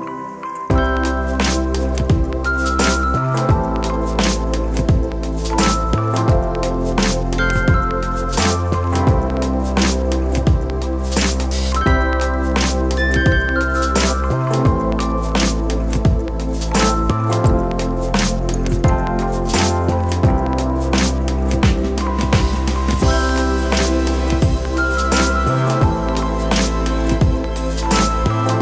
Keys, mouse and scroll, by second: 1.5 KP_1, 2.1 s, 5.2 shift+d, 6.4 Tab, 7.2 ctrl+r, 9.1 click, 10.2 shift+click, 11.2 x, 12.1 ctrl+r, 12.6 Escape, 13.1 click, 13.9 x, 15.3 click, 17.4 g, 23.8 Tab, 24.8 click, 26.4 KP_3, 27.4 Tab, 28.4 middle click.